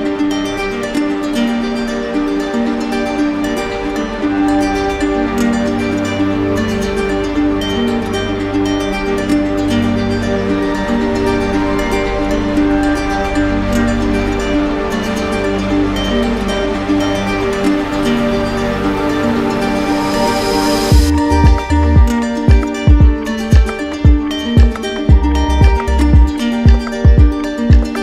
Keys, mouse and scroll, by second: 5.8 click, 7.2 click, 8.0 alt+click, 11.3 alt+click, 13.3-14.4 drag, 15.3-16.4 drag, 16.8 click, 18.1 alt+click, 18.9 alt+click, 19.9 click, 21.4 click, 22.0 alt+click, 23.8-24.9 drag, 26.2-28.0 drag.